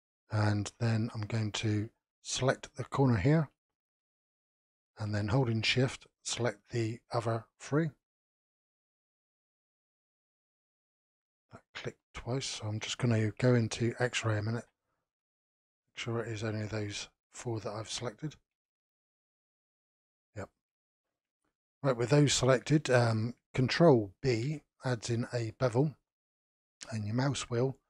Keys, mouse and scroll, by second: 0.5-2.5 middle drag, 2.5 click, 4.6 shift+click, 5.3-7.0 middle drag, 7.0 shift+click, 8.0 shift+click, 8.8 shift+click, 9.3-12.0 middle drag, 12.0-12.4 scroll down 2, 12.4-14.5 shift+middle drag, 14.5 alt+z, 14.9-15.5 scroll up 5, 15.5-17.6 middle drag, 17.6-18.0 scroll down 3, 18.0-21.0 shift+middle drag, 21.0 alt+z, 21.4-24.2 middle drag, 24.2 ctrl+b.